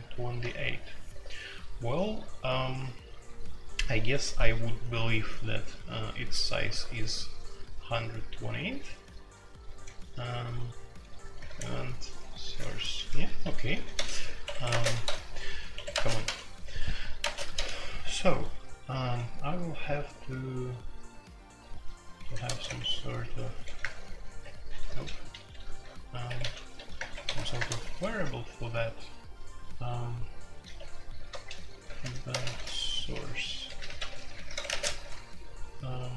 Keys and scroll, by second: 0.5 super+k, 0.5 typing, 2.6 super+k, 5.4-5.9 typing, 8.6-9.7 typing, 11.0-11.5 typing, 12.6-17.7 typing, 13.4 Escape, 14.4 Escape, 14.5 Escape, 15.7 Escape, 19.0 typing, 21.1-28.1 typing, 24.4 Escape, 26.2 Escape, 30.7 typing, 31.8-34.9 typing.